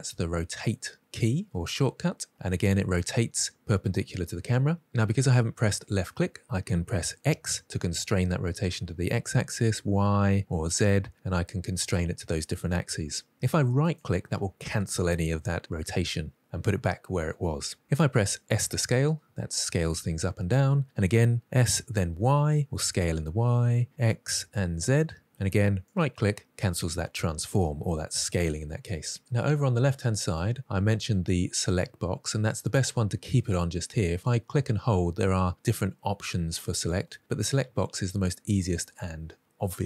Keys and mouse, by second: 7.5 x, 9.6 y, 10.5 z, 18.7 s, 22.0 y, 23.8 x, 24.2 z, 25.8 right click, 34.2 click.